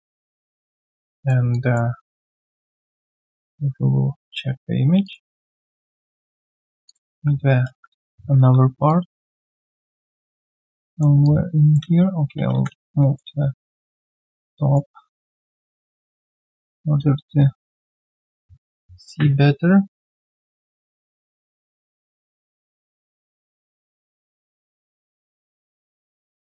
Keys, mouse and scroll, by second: 1.5 alt+click, 3.6 ctrl+1, 4.1 ctrl+1, 5.6 alt+click, 6.4 alt+right click, 7.1 w, 7.6 ctrl+d, 11.1 r, 11.2 alt+click, 11.8 space, 12.3 space, 12.7 f, 12.9 alt+right click, 13.1 alt+middle click, 13.4 alt+scroll down 1, 13.8 alt+right click, 14.3 alt+middle click, 14.6 alt+right click, 15.0 typing, 19.5-20.8 typing, 23.1 alt+click, 23.3 alt+right click, 23.5-25.2 typing, 23.7 right click, 24.4 shift+click, 24.5 shift+double click, 26.0 alt+click.